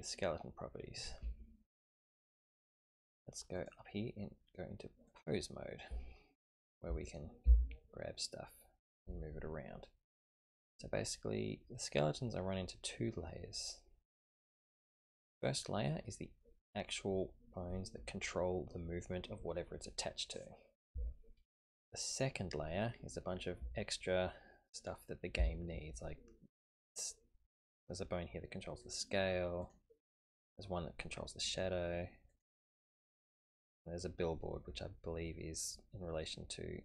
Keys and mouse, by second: 1.3 shift+middle click, 3.6-5.2 drag, 6.0 shift+middle click, 7.0 click, 7.4 g, 10.0 typing, 14.7 click, 22.1 click, 26.7 click, 28.8 click, 29.6 click, 31.5 click, 32.3 click, 33.0 click.